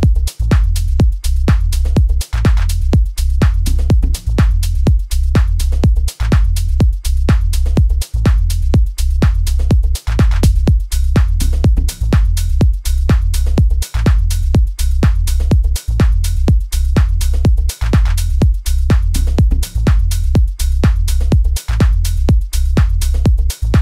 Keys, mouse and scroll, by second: 0.8 F1, 0.8 right click, 4.9 double click, 5.5 click, 8.6 click, 12.6 right click, 20.2 right click, 20.9 Return.